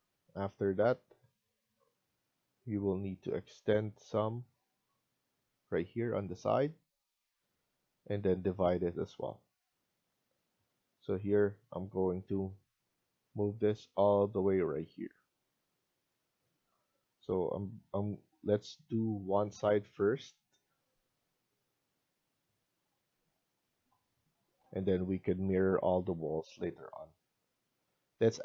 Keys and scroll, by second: 9.9 Escape, 10.7 Escape, 23.0 Escape, 24.3-25.0 typing.